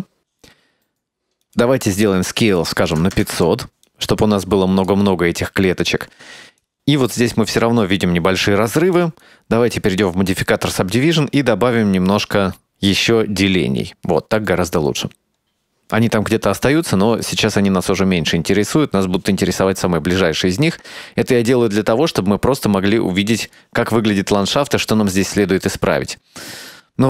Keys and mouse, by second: 1.5-3.9 drag, 3.2 KP_0, 5.2-5.9 middle drag, 6.8 click, 7.7 click, 9.0 click, 11.5 click, 20.2-23.7 drag.